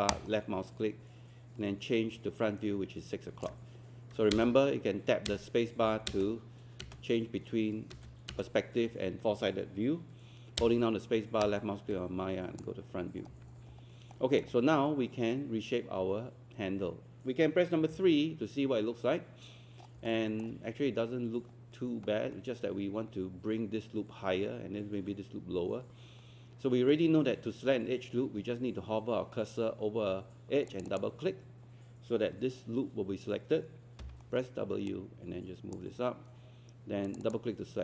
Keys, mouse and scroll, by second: 0.1-8.5 drag, 8.5 space, 11.4-13.1 drag, 13.1 scroll up 1, 13.6 scroll up 1, 14.1 alt+middle click, 17.9 3, 19.9 scroll up 1, 20.1 alt+middle click, 30.7 click, 34.0 w, 34.9-37.8 drag.